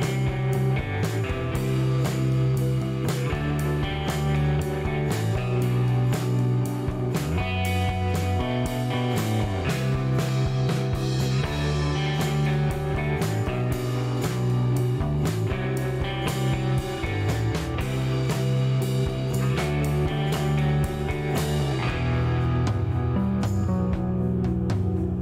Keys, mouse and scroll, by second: 0.3 click, 1.9 click, 3.7-6.1 drag, 7.3 click, 9.3 click, 11.4 KP_1, 11.5 KP_3, 13.0 click, 14.6 click, 16.3 click, 20.4 click, 22.9 KP_4, 23.0 KP_0, 23.4 KP_Enter, 24.3 scroll down 2, 24.4 middle click.